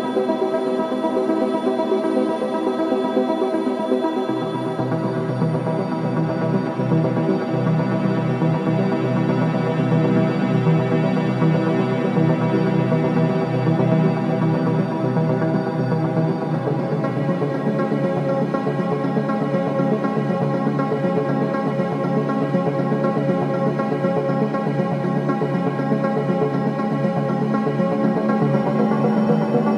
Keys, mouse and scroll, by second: 3.3-11.9 drag, 11.9-17.9 drag, 26.1-29.7 drag.